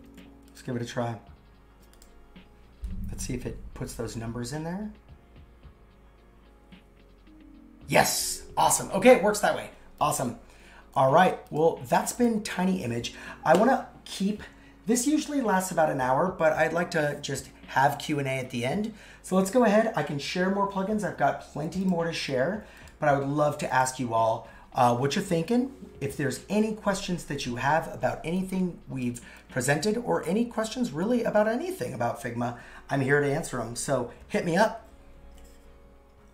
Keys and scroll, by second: 30.5 super+x.